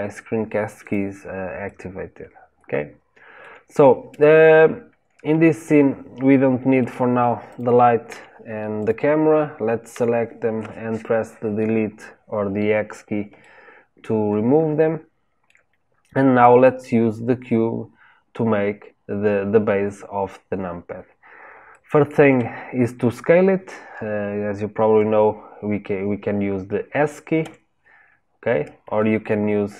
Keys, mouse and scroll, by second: 0.7 click, 1.6-4.6 shift+middle drag, 5.4-7.4 shift+middle drag, 7.4 click, 8.0 Delete, 8.7 click, 9.8 Delete, 13.3-16.4 shift+middle drag, 16.4 click, 21.7-24.7 shift+middle drag.